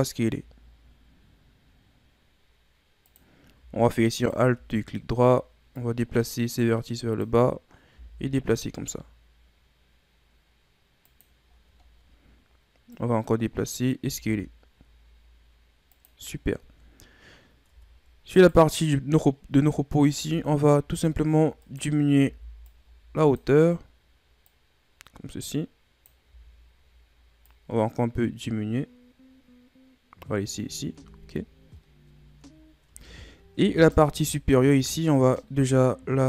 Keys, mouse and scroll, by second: 4.2 alt+right click, 5.8-7.9 drag, 7.9 s, 11.5-12.1 scroll down 4, 12.1-12.9 scroll up 2, 12.9-14.1 drag, 14.1 s, 16.3-17.7 shift+scroll down 4, 17.7 Tab, 18.4 right click, 20.1 Tab, 20.8 z, 21.6 right click, 22.2 b, 24.5-26.2 drag, 26.2 z, 27.5-30.5 drag, 31.0 Tab, 31.4 shift+scroll down 2, 31.7-32.9 shift+scroll up 16, 32.9 Tab, 33.6 Tab, 33.8 right click, 34.1 Tab, 35.2 alt+right click.